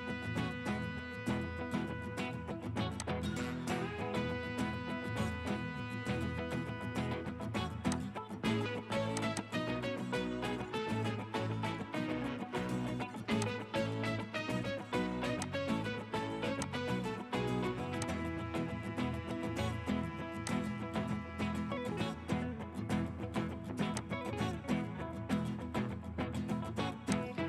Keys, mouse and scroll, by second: 0.0-1.0 typing, 9.4 double click, 13.5 double click, 25.7 scroll up 1.